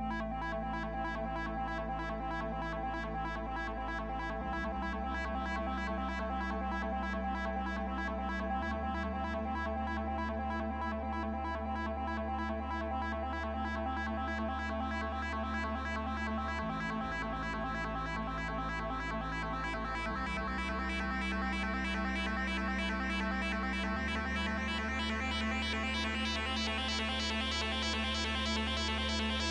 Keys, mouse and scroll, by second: 0.5 click, 1.4 double click, 11.6 BackSpace, 11.7 Return.